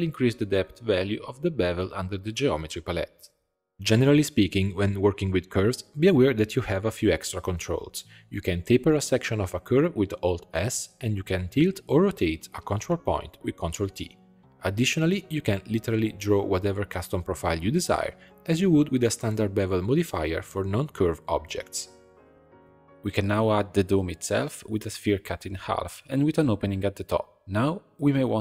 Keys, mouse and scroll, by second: 0.0 click, 0.9-2.4 drag, 2.7 click, 3.7 ctrl+scroll up 1, 3.9-5.8 middle drag, 5.8 click, 6.6-7.9 shift+middle drag, 7.9 click, 8.2 alt+s, 11.4 ctrl+t, 14.6-20.0 drag, 21.6-22.1 drag, 22.1 shift+a, 23.6 b, 24.3 scroll down 1, 24.4 x, 25.3 c, 26.6 x, 27.8 click, 28.1 middle click.